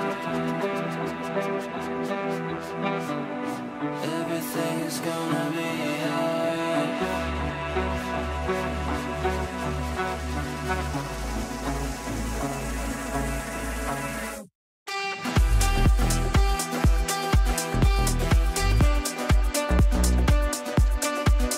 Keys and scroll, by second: 3.0 shift+Page_Up.